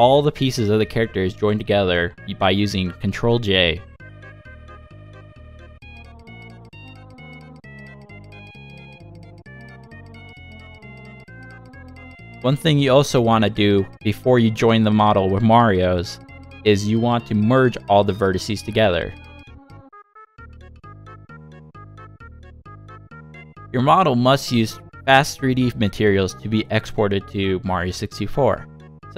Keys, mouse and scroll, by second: 0.1 scroll down 1, 0.4 middle click, 1.2 shift+middle click, 1.8 shift+click, 3.5 ctrl+j, 5.1 shift+middle click, 5.6 middle click, 7.5 Tab, 9.4 click, 10.5 m.